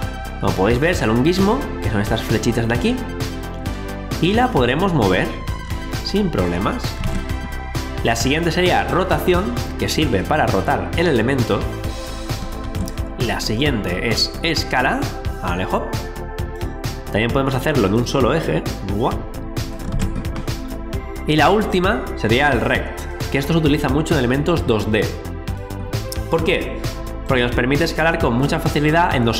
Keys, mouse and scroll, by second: 1.6 scroll up 1, 2.3 alt+click, 7.0 ctrl+z, 8.9 click, 12.6 ctrl+z, 13.5 click, 19.9 ctrl+z, 21.6 click.